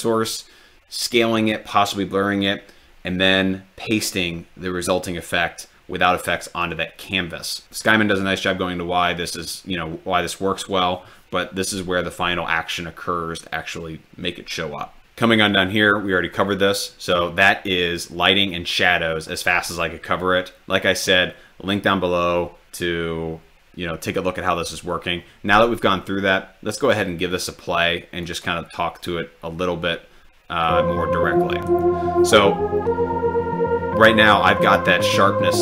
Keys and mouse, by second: 28.3 click, 31.0-32.2 drag.